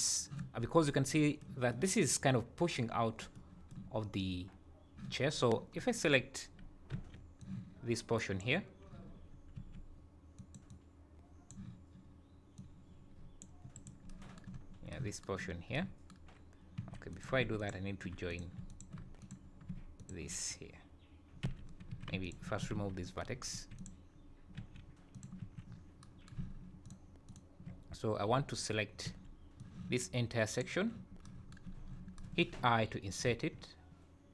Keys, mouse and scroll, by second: 0.6 scroll up 5, 0.9 middle click, 1.7 middle click, 3.4 middle click, 5.4 scroll up 2, 5.8-6.3 scroll down 4, 6.9 b, 9.6 c, 14.5-14.9 scroll up 5, 16.8 1, 17.1 click, 17.6 shift+click, 18.3 click, 18.7 shift+click, 19.2 click, 20.0 shift+click, 21.4 j, 21.9 2, 22.2 alt+click, 22.8 ctrl+x, 23.6 1, 23.8 click, 24.6 g, 25.4 3, 25.7-26.0 scroll down 5, 26.8 alt+click, 27.3 alt+click, 29.1 b, 31.4 b, 31.7 scroll up 2, 33.3 i.